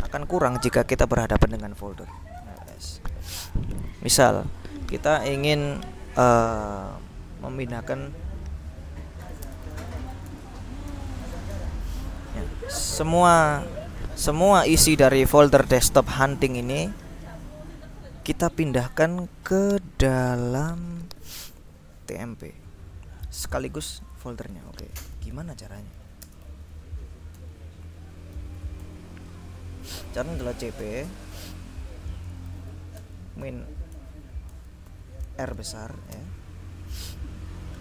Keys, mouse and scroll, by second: 0.0-0.1 typing, 2.2-3.1 typing, 9.0-11.9 typing, 10.9 Return, 14.8 click, 15.1 click, 16.8-18.8 drag, 24.0-25.1 drag, 25.2 ctrl+l, 25.7-27.0 typing, 27.6 Return, 28.2-29.1 typing, 30.4 c, 30.7 p, 30.9 space, 32.6-36.3 typing.